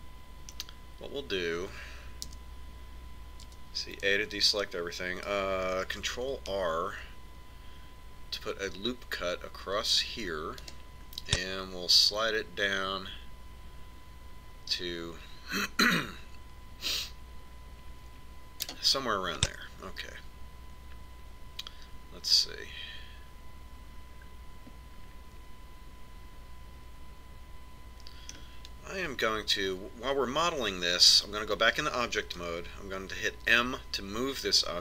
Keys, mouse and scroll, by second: 2.8 KP_1, 4.1 a, 6.7 ctrl+r, 20.2-21.9 middle drag, 31.6 Tab, 34.2 m.